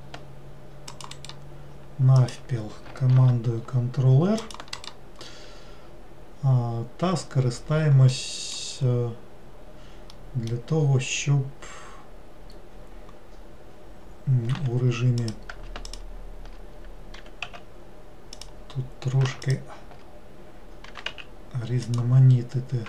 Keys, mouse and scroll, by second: 2.3 click, 3.2 ctrl+r, 8.2 middle click, 8.9-10.2 scroll up 2, 10.2-13.2 middle drag, 15.3 click, 15.9 alt+click, 17.3 g, 19.5 alt+click, 21.0 g.